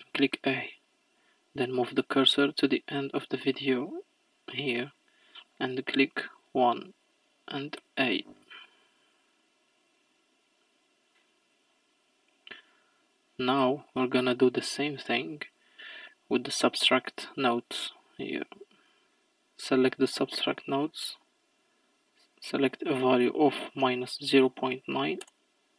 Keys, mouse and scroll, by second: 1.2-7.8 drag, 10.0-22.9 drag, 25.2-25.7 drag.